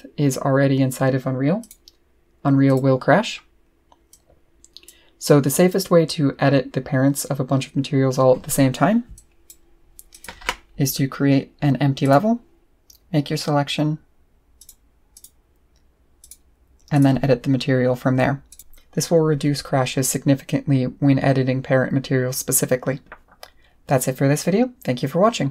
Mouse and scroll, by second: 1.6 click, 2.7 click, 4.1 click, 9.1 click, 10.1 click, 12.0 click, 14.6 click, 15.1 click, 16.2 click, 16.9 click, 18.5 click.